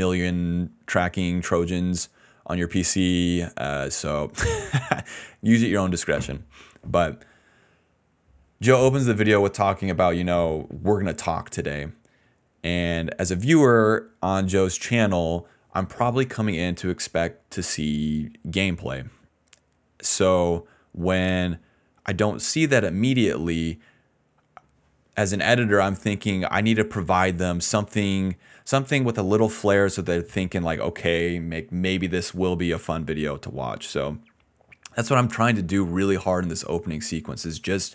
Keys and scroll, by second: 2.5 ctrl+c, 28.0 a.